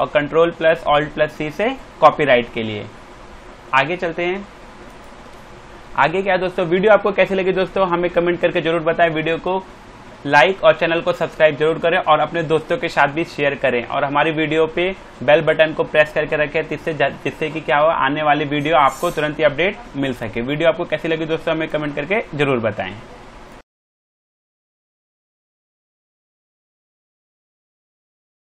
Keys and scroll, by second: 5.9 Down, 20.1 d.